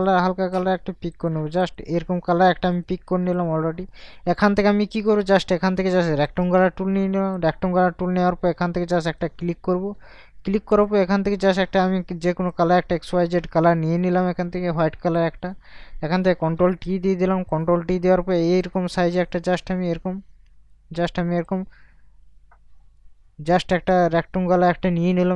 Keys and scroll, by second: 16.6 ctrl+t.